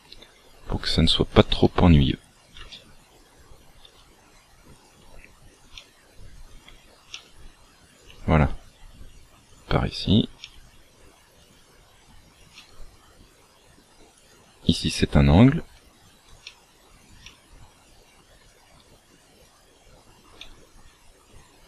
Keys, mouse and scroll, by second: 0.0 e, 1.6 e, 2.7 shift+middle click, 3.8 e, 4.8 e, 7.1 e, 8.0 e, 10.4 e, 11.6 e, 12.5 e, 15.6 e, 16.4 e, 17.2 e, 17.9 e, 20.4 e, 21.5 e.